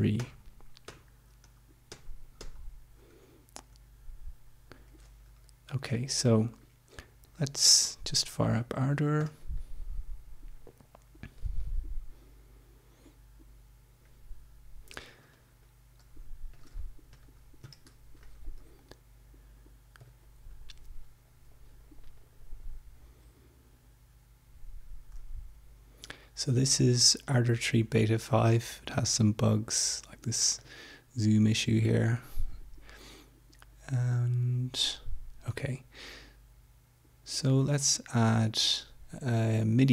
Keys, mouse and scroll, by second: 0.4 Page_Down, 1.1 Page_Down, 1.4 Page_Down, 2.4 Page_Down, 3.1 Page_Up, 3.9 Page_Up, 9.2 click, 15.1 click, 16.4 click, 17.1 l, 17.5 v, 18.1 2, 19.9 click, 30.5 click, 31.7 click, 37.5 right click.